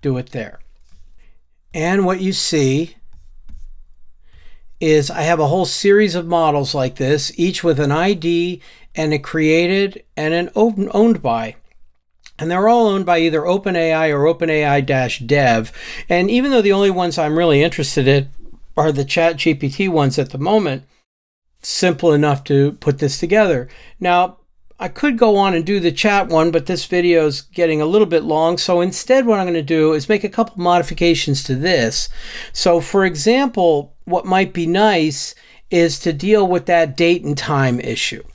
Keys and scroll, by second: 1.1 ctrl+shift+r.